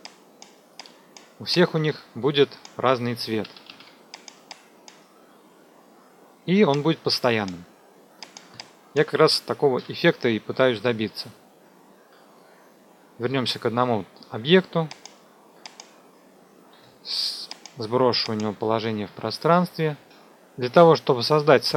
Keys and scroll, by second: 3.4 ctrl+d, 9.7 Delete, 16.7 p, 20.3 p.